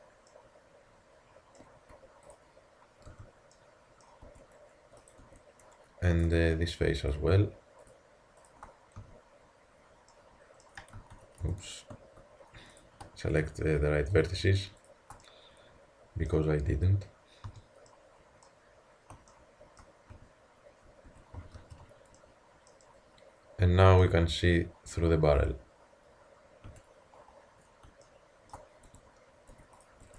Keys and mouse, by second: 0.3-0.6 middle drag, 1.9 Tab, 2.4 click, 3.1 h, 3.5-4.0 middle drag, 4.3 Tab, 5.0-6.3 drag, 5.3 Tab, 9.0 f, 11.0 ctrl+z, 12.8-15.2 drag, 15.2-17.5 middle drag, 17.5 f, 17.9 click, 20.2 a, 21.1 Tab, 21.6 alt+h, 26.7 a, 28.9 Tab, 29.5 Tab.